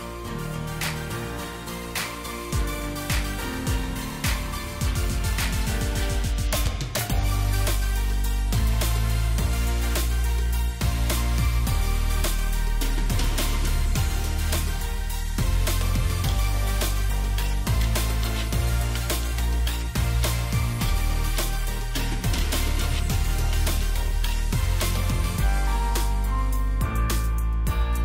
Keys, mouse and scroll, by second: 1.0 double click, 7.4 alt+shift+click, 9.1 double click, 14.0 Delete, 14.2 Delete, 17.3 alt+click, 20.7 alt+click, 26.9 double click.